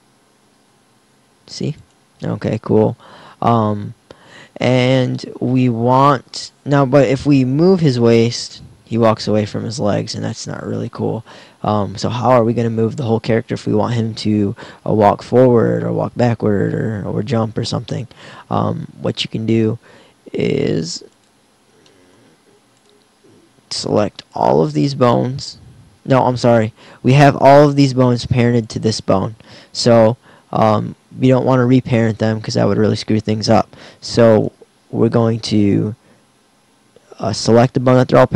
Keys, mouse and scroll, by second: 7.6 g, 28.7-30.5 right drag, 34.5-35.6 right drag.